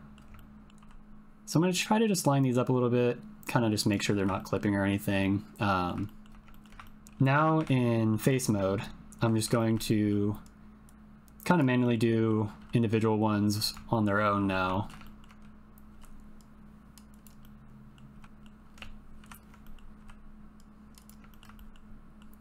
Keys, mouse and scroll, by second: 0.3 ctrl+middle click, 0.8 g, 3.8 click, 4.4 shift+middle click, 5.3 middle click, 6.0 shift+middle click, 6.6 ctrl+middle click, 7.6 3, 8.0 click, 8.3 click, 9.2 ctrl+l, 9.5 shift+middle click, 9.8 middle click, 10.8 click, 12.6 g, 13.9 click, 14.2 click, 14.7 shift+middle click, 15.0 ctrl+middle click, 15.9 g, 17.5 middle click, 18.1 r, 18.2 middle click, 19.2 ctrl+l, 19.6 middle click, 20.0 g, 21.6 shift+click, 21.9 click.